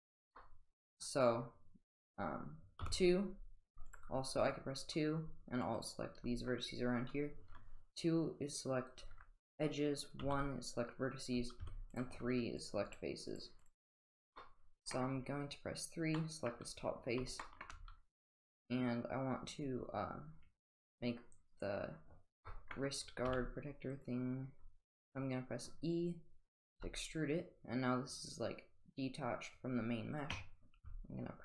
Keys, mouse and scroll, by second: 0.4-0.8 middle drag, 2.8 typing, 3.8 click, 10.2 1, 11.6 3, 12.6 click, 12.9 click, 14.4-14.9 middle drag, 16.2 middle drag, 17.4 shift+middle drag, 22.5 middle click, 23.2 e, 26.7 g, 30.8 s.